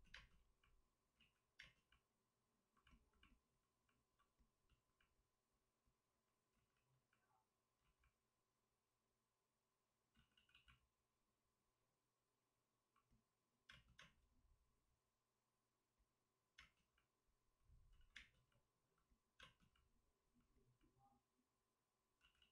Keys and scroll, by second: 1.1 ctrl+z, 1.1 space, 5.7 ctrl+z, 6.5 ctrl+z, 7.7 ctrl+z, 10.1 ctrl+z, 10.3 ctrl+z, 13.6 space, 13.9 space, 16.2 space, 16.5 space, 17.9 ctrl+z, 18.1 space, 19.7 space, 22.1 ctrl+z, 22.3 ctrl+z.